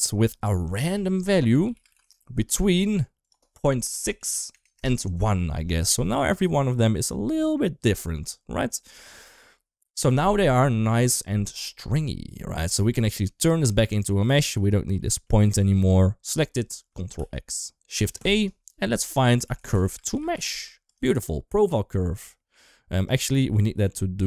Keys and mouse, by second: 0.1-2.7 drag, 3.1-4.7 drag, 6.5 middle click, 12.8 middle click, 13.6 click, 13.8 click, 14.4 click, 14.9 middle click, 15.6 click, 17.1 ctrl+x, 17.8 shift+a, 22.2 middle click, 22.9 ctrl+middle click, 23.2 ctrl+x, 23.4 middle click, 24.0 click.